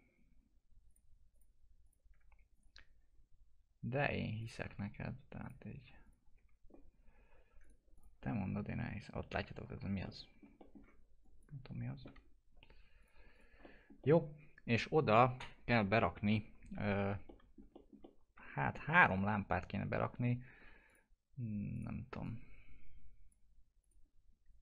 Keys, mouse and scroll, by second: 4.4 ctrl+click, 6.3 F4, 7.6 click, 8.2 scroll down 1, 8.4 F4, 8.7-10.0 scroll down 1, 10.0 middle click, 10.7 scroll down 1, 11.2 click, 12.0 p, 13.0 click, 13.6 alt+middle click, 16.2 middle click, 17.2 alt+middle click, 18.0 middle click, 18.8 scroll down 1, 20.9-23.8 drag, 23.8 click.